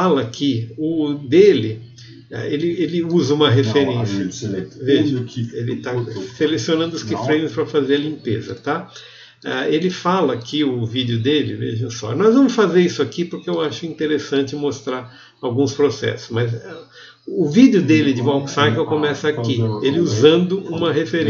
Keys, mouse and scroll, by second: 5.8 v, 13.7 click, 21.1 scroll up 3, 21.1 g.